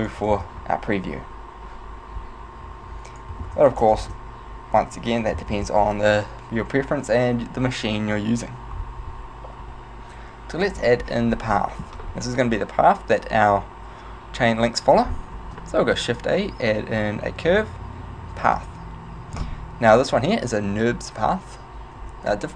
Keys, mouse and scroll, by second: 0.1 click, 3.2 click, 4.1 click, 4.1 KP_0, 5.3 click, 11.6 middle click, 15.4 shift+a, 22.1 Tab.